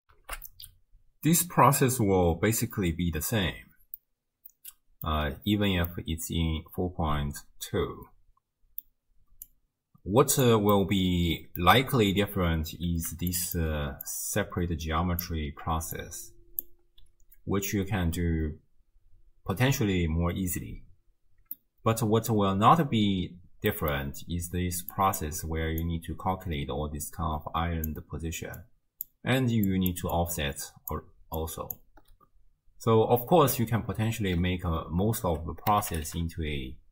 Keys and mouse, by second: 0.0 ctrl+alt+shift+w, 0.3 ctrl+alt+shift+q, 4.0-5.1 drag, 4.0-5.1 middle drag, 4.0-5.1 right drag, 5.9-8.9 drag, 5.9-8.9 middle drag, 5.9-8.9 right drag, 9.7 click, 10.8 click, 10.8 middle click, 10.8 right click, 13.1-16.9 d, 13.4 click, 14.1-15.3 drag, 16.6 click, 21.6 click, 21.6-22.3 middle drag, 21.6 right click, 23.9 click, 23.9 middle click, 23.9 right click, 24.4-31.3 d, 24.9 click, 28.6 click, 29.9 click, 30.2 click, 31.4 click, 31.4-32.0 d, 34.3 ctrl+a.